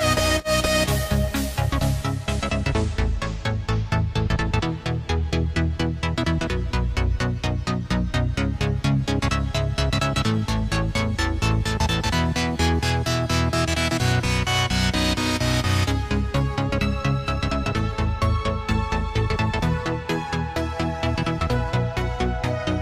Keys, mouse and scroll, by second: 0.3 click, 3.6-6.7 drag, 7.6 click, 10.2-12.3 drag, 12.8-15.8 drag, 16.4 s, 21.6 click.